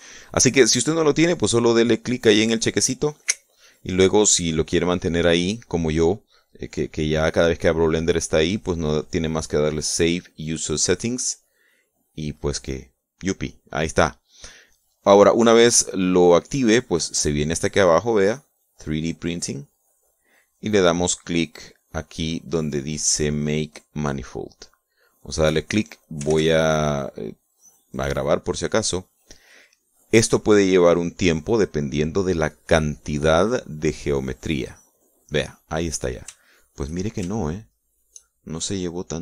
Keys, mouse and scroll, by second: 3.6 click, 13.0 click, 21.1 click, 27.5 ctrl+s, 27.5 ctrl+click, 30.1 click, 36.7 click, 37.6 shift+click, 38.7 shift+click.